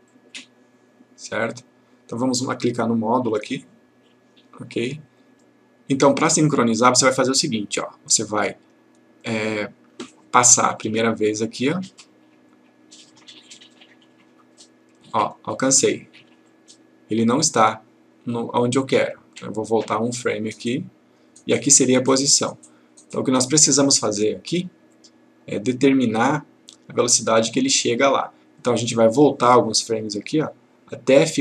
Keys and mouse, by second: 0.2-2.0 click, 5.8-7.1 click, 10.9-12.1 click, 20.3 click, 23.8-24.7 click, 30.3 click.